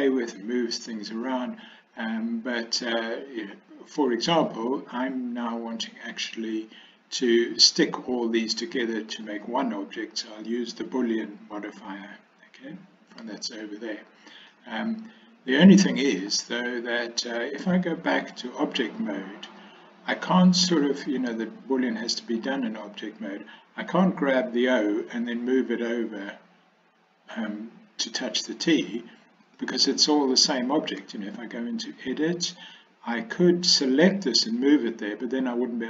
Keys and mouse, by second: 14.6-16.3 middle drag, 18.2 Tab, 31.1 Tab.